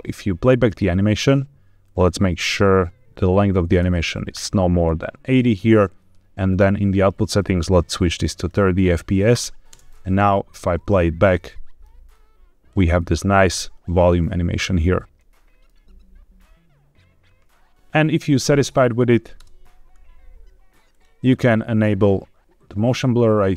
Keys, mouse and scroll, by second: 1.7-4.7 drag, 6.4 click, 7.3-8.4 drag, 9.7 space, 11.4 middle click, 12.2 scroll up 2, 12.9 middle click, 15.3 middle click, 17.8 space, 19.3 KP_0, 20.8 click, 21.7-22.4 scroll down 2, 22.7 click.